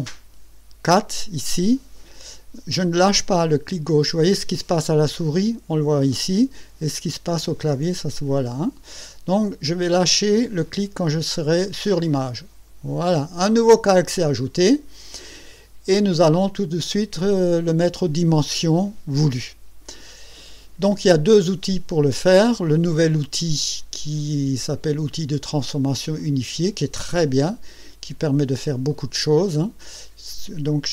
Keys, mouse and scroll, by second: 28.9 click.